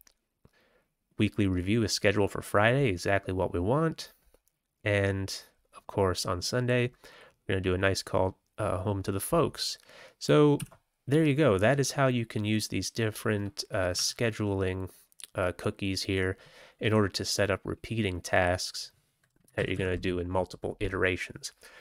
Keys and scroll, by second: 10.5 q, 13.9 Tab, 19.5 ctrl+x, 19.7 ctrl+s.